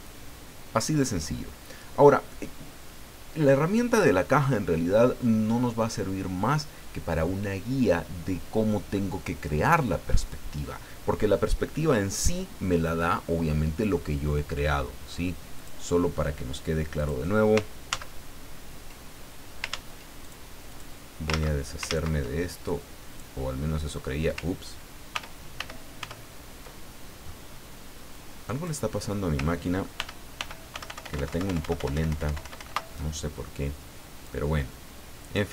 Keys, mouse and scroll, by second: 15.5 click, 17.0 click, 17.9 ctrl+z, 19.7 ctrl+z, 20.2 ctrl+click, 20.7 ctrl+click, 21.3 ctrl+z, 22.6 ctrl+click, 25.1 ctrl+y, 28.1 click, 30.0 ctrl+y, 34.2-35.5 drag.